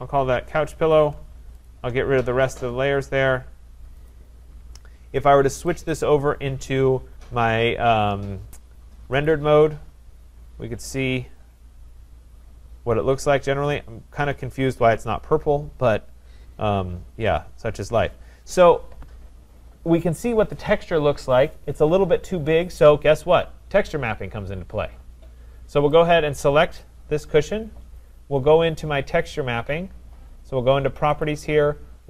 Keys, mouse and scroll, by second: 0.9 click, 1.7 shift+click, 2.6 click, 4.1 click, 5.8 click, 9.3 click, 16.3-16.9 scroll, 16.9-18.2 scroll, 18.2-19.2 scroll, 24.9-26.9 scroll, 26.9 click, 27.7 middle click, 31.0 click, 31.2 click.